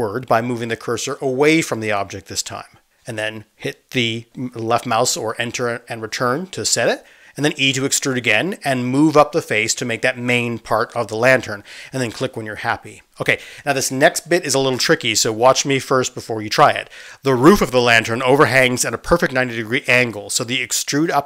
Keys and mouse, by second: 4.1-21.2 middle drag, 8.8 e.